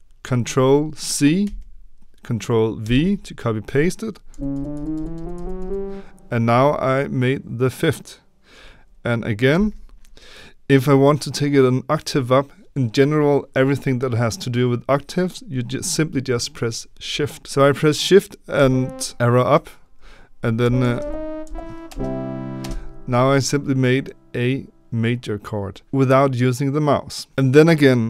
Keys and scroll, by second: 1.4 ctrl+c, 4.2 Up, 4.2 ctrl+v, 4.5 Up, 4.7 Up, 4.9 Up, 5.1 Up, 5.3 Up, 5.5 Up, 9.5 ctrl+v, 18.5 shift+Up, 20.6 Up, 20.8 Up, 20.9 Up, 21.4 Up.